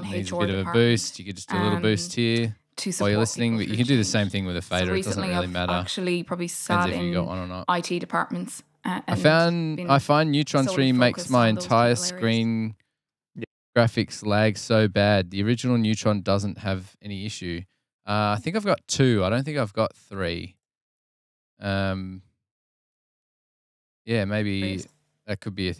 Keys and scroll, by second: 24.5 space.